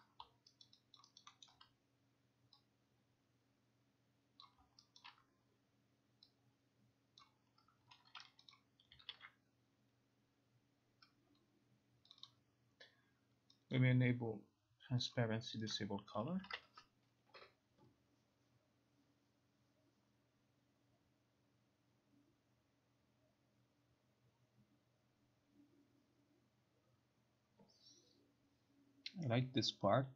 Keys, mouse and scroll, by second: 0.0 click, 0.7 alt+right click, 0.7 click, 1.1 alt+right click, 1.5 alt+middle click, 4.5 click, 5.0 alt+middle click, 7.3 click, 8.6 click, 9.2 ctrl+r, 12.2 click, 12.3 click, 13.8 click, 15.2 click, 15.8 click, 16.4 click, 16.5 ctrl+r.